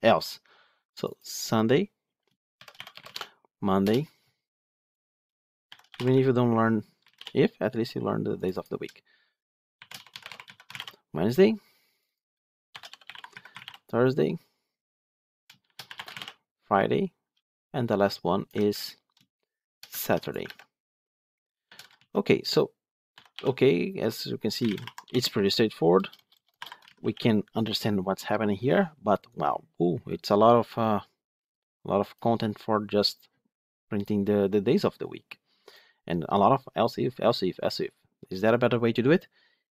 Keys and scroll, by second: 18.5 ctrl+c, 20.3 ctrl+v.